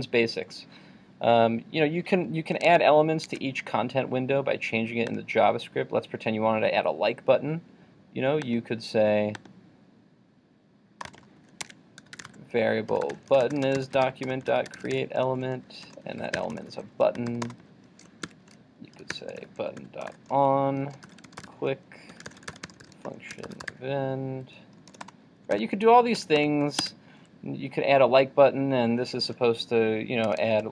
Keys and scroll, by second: 2.7 super+Tab.